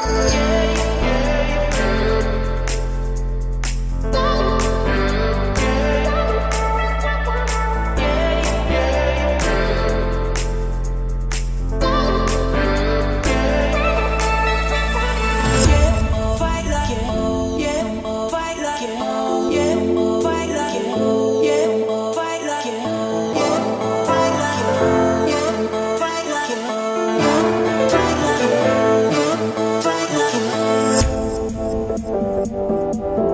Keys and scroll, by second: 8.1 Escape, 12.6 Escape, 17.1 Escape, 23.9 Escape, 29.9 1, 30.5 Return.